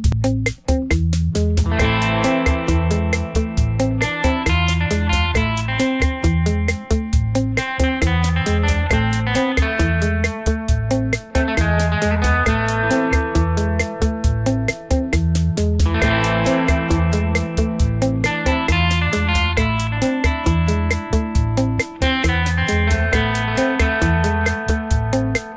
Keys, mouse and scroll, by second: 0.2 n, 0.9 shift+a, 2.3 click, 2.8 click, 4.1 click, 5.6 middle click, 6.5 Tab, 7.0 middle click, 9.4 s, 10.5 middle click, 11.4-12.1 scroll up 3, 12.1-12.7 scroll down 1, 12.9 g, 14.5 middle click, 15.3 click, 16.2 3, 16.4 click, 17.2 i, 19.4-19.8 scroll up 3, 20.8 scroll up 1, 20.8 s, 23.0 middle click, 25.1 e.